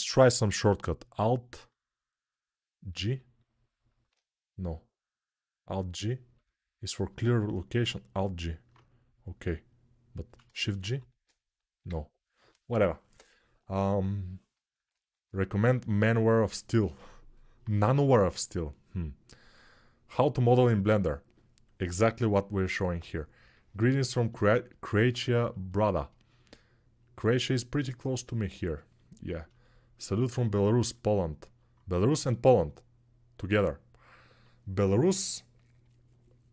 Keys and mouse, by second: 2.7 alt+g, 5.4 click, 5.5 middle click, 6.1 click, 6.2-36.5 middle drag, 10.5 shift+g.